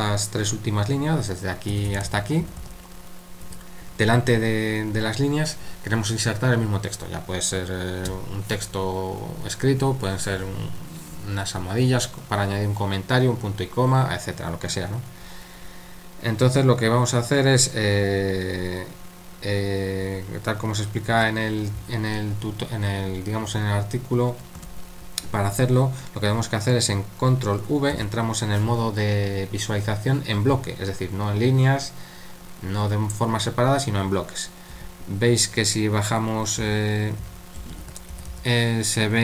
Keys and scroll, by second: 1.5-3.1 typing, 21.1 super+1, 24.6 super+3, 27.9 ctrl+v, 34.7 k, 36.3-39.2 typing.